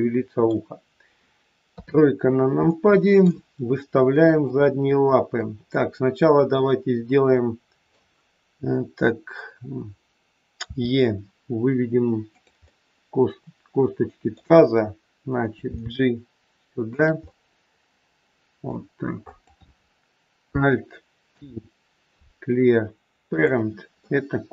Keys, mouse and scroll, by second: 1.6 KP_3, 2.1-2.6 scroll down 3, 2.7 shift+middle click, 3.5-4.3 scroll up 1, 4.3 click, 5.3 middle click, 10.6 e, 12.6 middle click, 15.7 g, 17.1 scroll up 1, 17.2 middle click, 19.2 click, 21.3 alt+p, 23.9 middle click.